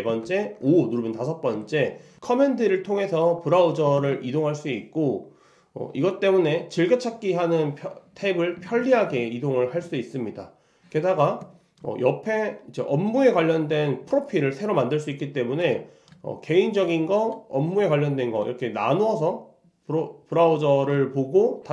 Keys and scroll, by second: 0.3 super+5, 4.0 super+1.